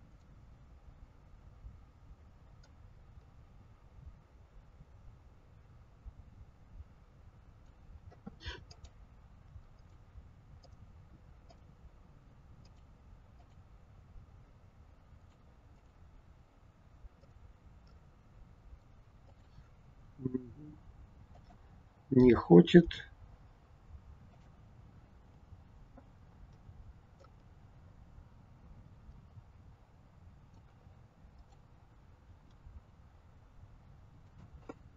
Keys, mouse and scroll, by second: 0.0 click, 2.6 click, 8.7 click, 9.8 click, 10.7 click, 12.6 click, 15.3 click, 15.8 click, 17.2 click, 17.9 middle click, 19.2 click, 20.1 g, 22.2 click, 24.4 click, 27.2 click, 31.4 click, 32.3 g.